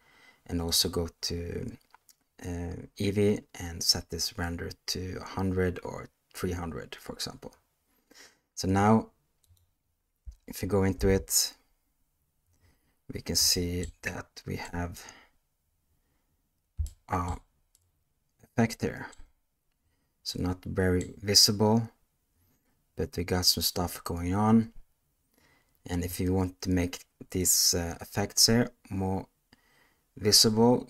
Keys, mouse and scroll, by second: 0.6 click, 9.4 click, 10.9 space, 13.5-13.9 shift+middle drag, 14.0-14.6 middle drag, 16.8-17.4 shift+middle drag, 17.7-19.1 middle drag, 20.2-21.0 middle drag, 27.4 click.